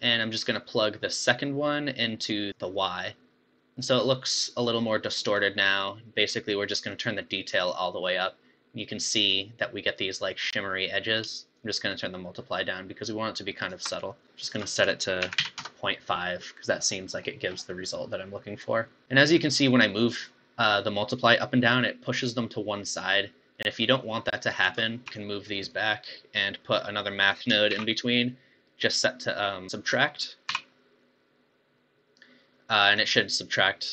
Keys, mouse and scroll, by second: 1.7 click, 3.7-6.9 middle drag, 6.9-9.9 drag, 11.6-13.7 shift+drag, 13.9 click, 14.8-16.8 drag, 16.8-17.2 scroll up 4, 17.2-17.8 scroll down 6, 17.8-19.5 middle drag, 19.7-22.7 shift+drag, 25.2 g, 25.9 click, 27.2 click, 27.8 shift+d, 30.1-32.8 drag, 32.8-33.2 scroll up 3.